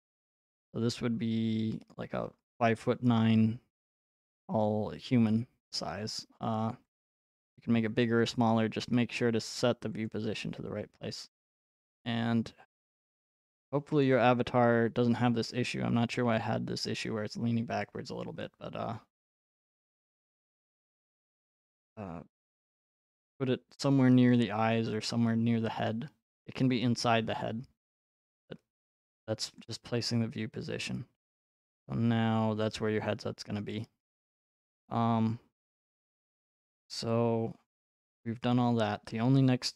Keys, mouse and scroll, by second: 1.9 click, 3.1-4.0 scroll, 8.0 click, 10.1 click, 11.9 right click, 16.9 click, 17.3-18.2 scroll, 18.2 right click, 18.2-18.6 scroll, 19.5 middle click, 20.9 right click, 23.0 middle click, 25.7 click, 27.0 right click, 28.0 middle click, 29.6 click, 33.4 middle click, 34.0 middle click, 34.0 right click, 36.1-37.3 scroll, 38.5-39.7 scroll.